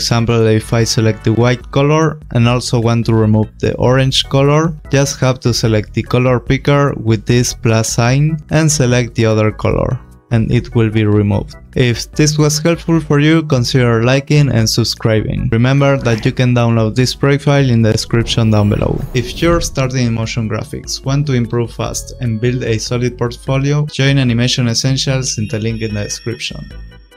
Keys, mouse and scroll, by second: 0.5 click, 7.8 click, 9.6 click.